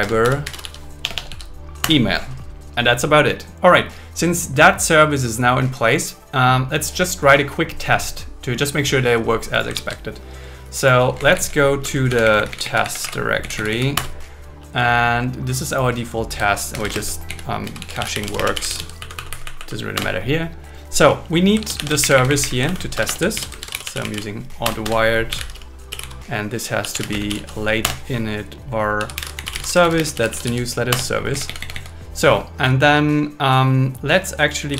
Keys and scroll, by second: 0.0 Return, 1.0 BackSpace, 1.8 Return, 9.9 super+1, 11.3 Left, 11.9 Right, 12.1 Down, 13.1 Right, 13.4 Down, 14.0 Return, 16.7 shift+\, 17.0 space, 17.3 Left, 18.4 space, 19.0 Right, 20.0 Return, 21.6 super+1, 22.0 Up, 22.8 super+Right, 23.0 Return, 23.4 alt+l, 23.6 shift+a, 24.6 Return, 27.1 space, 27.8 Return, 29.6-31.0 typing, 31.3 Down.